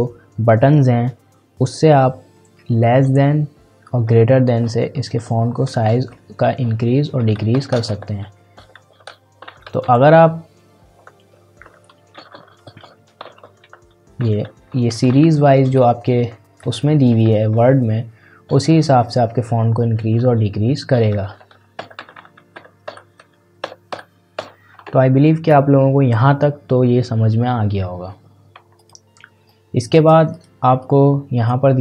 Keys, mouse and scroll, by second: 3.0 ctrl+shift+., 9.5 ctrl+shift+,, 12.7 ctrl+shift+., 13.2 ctrl+shift+,, 20.3 ctrl+shift+., 22.0 ctrl+shift+,, 28.7-31.8 drag.